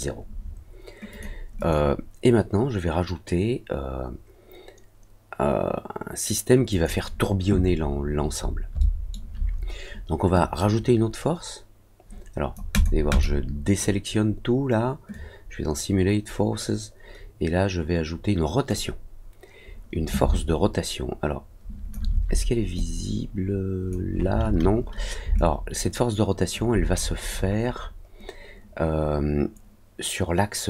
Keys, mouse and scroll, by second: 1.1 click, 6.6 click, 7.9 scroll down 1, 8.1 middle click, 8.4 middle click, 8.5 scroll down 1, 8.7 alt+middle click, 10.3-12.5 drag, 12.7 click, 13.0 click, 15.1-18.6 drag, 20.3-21.9 alt+drag, 22.7-23.8 drag, 25.3-26.5 alt+drag, 26.9 middle click, 27.2 middle click, 27.7 middle click.